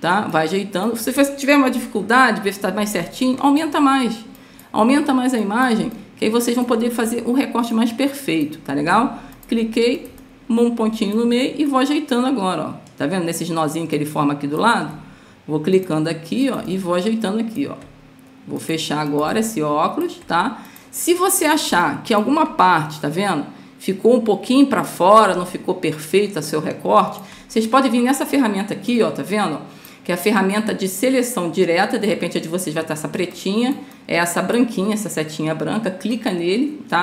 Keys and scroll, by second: 3.0 space, 21.7 space, 25.7 space.